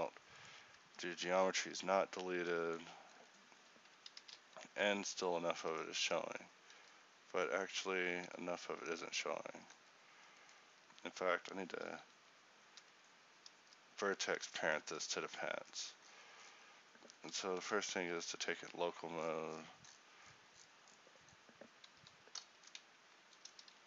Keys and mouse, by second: 0.9 Tab, 1.4 z, 1.8 z, 2.4 Tab, 4.7 z, 8.4 r, 16.4-17.6 middle drag.